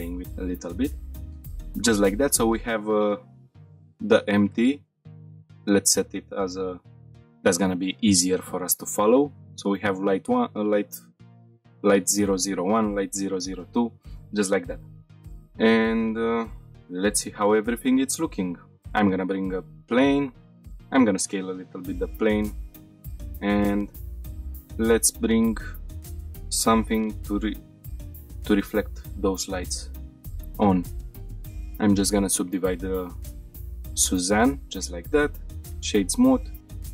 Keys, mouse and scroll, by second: 0.2 shift+middle click, 0.5 shift+middle click, 1.2 scroll down 1, 3.3 click, 5.4-6.9 drag, 9.4 click, 10.2 click, 12.8 click, 14.2-14.7 shift+middle drag, 14.8 middle click, 15.0 click, 15.0 scroll up 1, 15.2 shift+middle drag, 15.6 middle click, 16.0 shift+middle drag, 16.6-17.1 middle drag, 17.6 middle click, 18.3 shift+a, 20.6 s, 21.2 click, 21.9 ctrl+a, 22.8 shift+middle click, 23.4 a, 24.2 shift+a, 26.1 g, 26.2 z, 26.8 click, 27.3 s, 27.9 click, 27.9 g, 27.9 z, 28.1 click, 28.3-29.0 middle drag, 29.1 scroll up 3, 29.6 shift+middle click, 30.0 middle click, 31.4 click, 33.6-34.2 drag, 34.8 right click, 35.7-36.2 scroll up 2, 36.1 middle click.